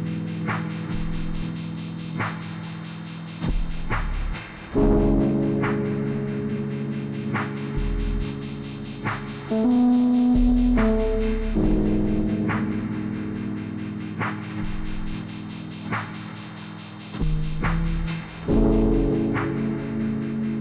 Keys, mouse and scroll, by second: 4.9-6.1 drag, 6.1 scroll down 1, 6.5-8.1 drag, 8.8 click, 9.4-9.8 scroll down 1, 9.8-11.3 drag, 11.3 scroll down 1, 11.5 scroll up 1, 11.7-12.3 scroll down 1, 12.3 scroll up 1, 12.4 click, 13.3 scroll down 1, 13.6 click, 14.2 click, 14.5 scroll down 1, 14.7 click, 16.4 scroll down 1, 16.7 click, 17.2 scroll down 1, 17.6 click, 18.7 scroll down 1, 18.8 click, 19.4 click, 19.9-20.6 drag.